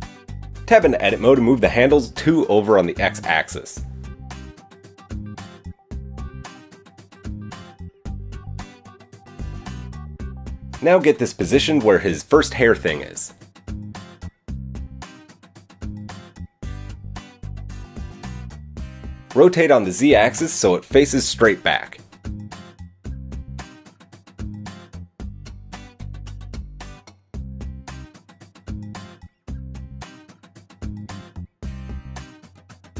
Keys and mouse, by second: 0.3 KP_1, 0.9 Tab, 2.5 g, 3.9 Tab, 6.9-14.4 shift+middle drag, 10.3 g, 14.4-19.9 drag, 18.2 KP_7, 19.9 middle click, 20.0 click, 20.2-25.3 shift+middle drag, 23.3 r, 28.9 KP_3, 30.7-32.9 middle drag.